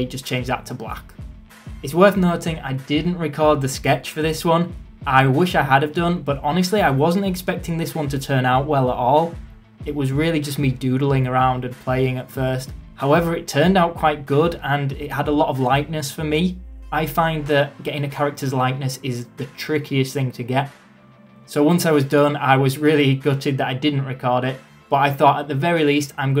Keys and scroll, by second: 0.2 ctrl+z, 0.9 ctrl+z, 1.3 ctrl+z, 1.9 ctrl+z, 9.1 ctrl+z, 9.6 ctrl+z, 11.2 ctrl+z, 11.9 ctrl+z, 12.6 ctrl+z, 15.3 ctrl+z, 16.0 ctrl+z, 16.7 ctrl+z, 17.9 ctrl+z, 19.4 ctrl+z, 21.3 ctrl+z, 22.4 ctrl+z.